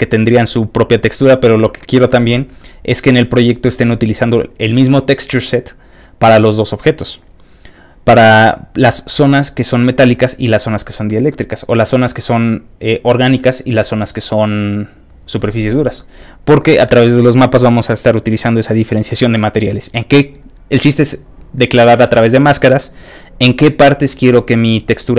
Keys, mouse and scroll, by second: 8.4-9.6 scroll up 1, 9.6-12.4 scroll up 1, 12.4-15.2 scroll up 1, 15.2-24.8 scroll up 1, 24.8-25.1 scroll down 2.